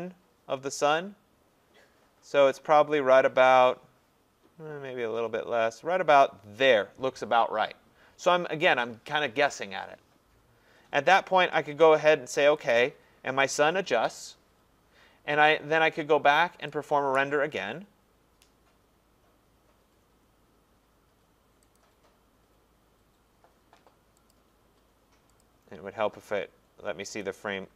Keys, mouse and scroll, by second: 6.6 click, 12.6 click, 16.9 click, 21.8 click, 24.4 click, 25.4 click, 27.2 click.